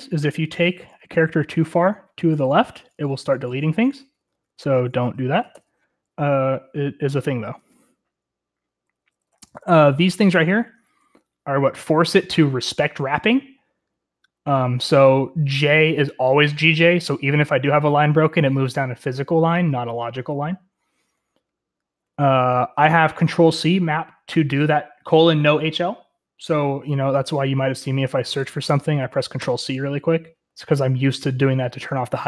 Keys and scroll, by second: 1.0 alt+h, 1.2 alt+h, 1.3 alt+h, 1.4 alt+h, 1.6 alt+h, 1.8 alt+h, 2.5 alt+h, 2.7 alt+h, 2.9 alt+h, 3.5 alt+h, 3.7 alt+h, 3.9 alt+h, 4.2 alt+h, 4.3 alt+h, 4.9 alt+h, 5.2 alt+h, 5.6 shift+u, 8.9 j, 9.3 j, 9.5 j, 11.0-11.8 typing, 21.2 Escape, 22.1 typing, 28.0-29.1 typing, 31.0 typing, 32.1 Return, 32.1 ctrl+c.